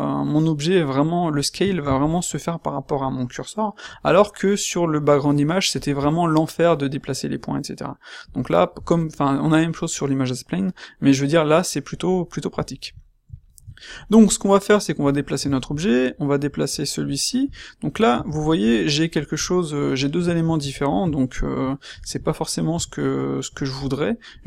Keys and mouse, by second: 20.1-20.5 middle drag, 20.5 q, 22.7 q.